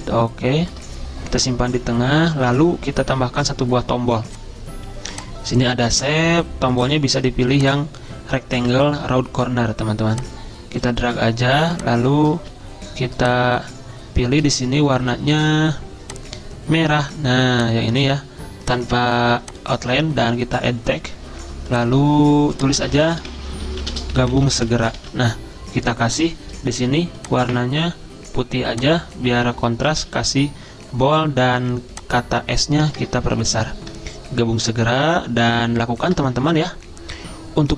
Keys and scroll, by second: 12.5 ctrl+z, 23.2-25.1 typing, 25.1 ctrl+a, 30.3 ctrl+b, 33.1 shift+BackSpace.